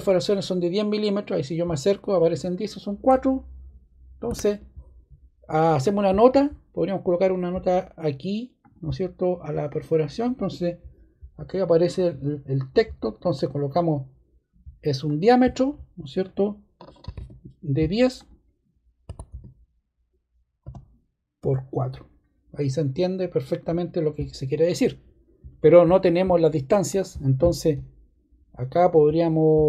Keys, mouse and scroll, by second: 8.6 click, 9.6 click, 11.9 click, 13.7 click, 15.0 click, 16.7-21.3 typing, 23.2 click.